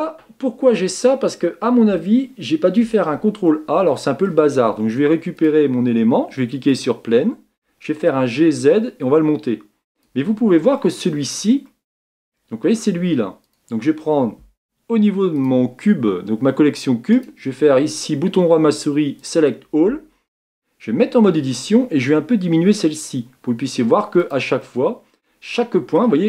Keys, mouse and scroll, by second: 0.5-1.4 scroll up 1, 1.4-2.0 scroll up 1, 3.5-5.4 shift+middle drag, 5.4 click, 6.8 click, 7.9 g, 10.8-13.5 shift+middle drag, 13.5 click, 19.3-21.1 right drag, 21.1 Tab, 23.2 s, 24.6-26.2 middle drag.